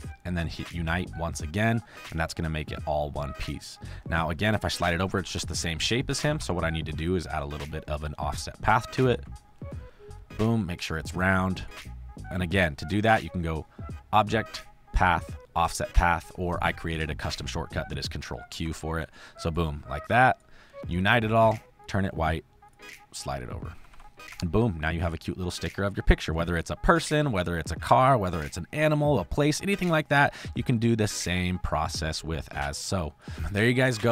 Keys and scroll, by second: 4.7 Left, 6.1 Right, 9.0 ctrl+q, 18.4 ctrl+q, 23.7 Left, 26.0 space, 32.6 space, 33.9 f.